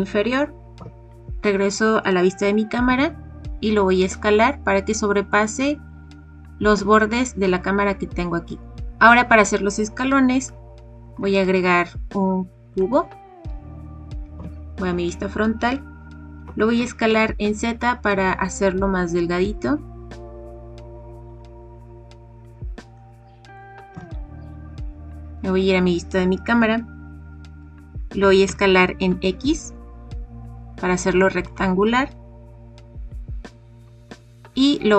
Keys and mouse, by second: 0.7 KP_0, 2.8 s, 5.8 click, 9.9 click, 10.0-10.4 middle drag, 11.1 shift+a, 14.3 KP_1, 16.4 s, 16.7 z, 21.1 click, 22.9-23.5 middle drag, 23.9 KP_0, 28.1 s, 28.4 x, 33.8 g, 34.0 y.